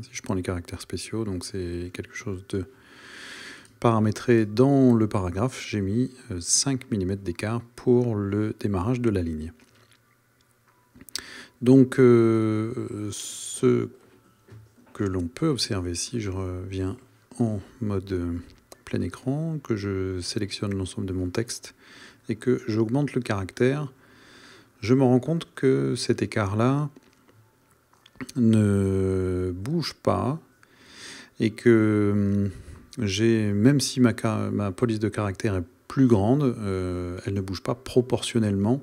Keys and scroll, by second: 19.1 super+a.